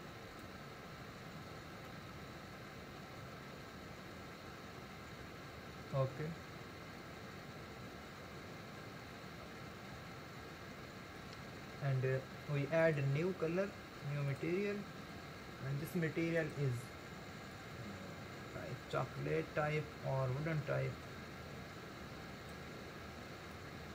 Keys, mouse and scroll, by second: 1.9-5.1 middle drag, 12.8-16.5 drag.